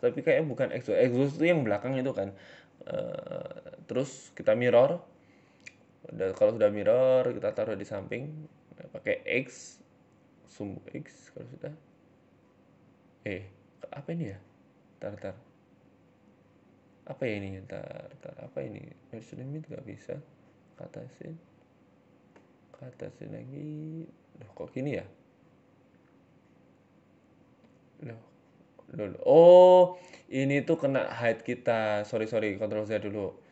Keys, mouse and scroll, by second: 0.3 x, 1.0 right click, 1.4 g, 2.6 s, 4.1 shift+middle click, 4.6 Tab, 4.9 a, 5.6 click, 6.0 g, 8.2 click, 8.4 click, 8.9 s, 10.5 g, 11.3-11.7 scroll down 4, 11.5 middle click, 11.9-12.4 scroll up 1, 12.6 Tab, 12.6 scroll up 3, 12.8 g, 14.4-14.8 scroll up 5, 14.5 Tab, 14.8 middle click, 15.8 Tab, 16.1 middle click, 18.2 click, 18.8 Tab, 19.6 g, 21.4 Tab, 21.8 g, 22.9 z, 23.5 middle click, 26.7 click, 27.1 click, 27.4 click, 27.6 click, 27.9 click, 28.6 middle click, 28.8 Tab, 29.3 middle click, 30.3 ctrl+z, 30.5-31.4 ctrl+z, 31.7 ctrl+z, 31.9 ctrl+z, 32.2 ctrl+z, 32.4 ctrl+z, 32.7 ctrl+z, 32.9 ctrl+z, 33.2 ctrl+z.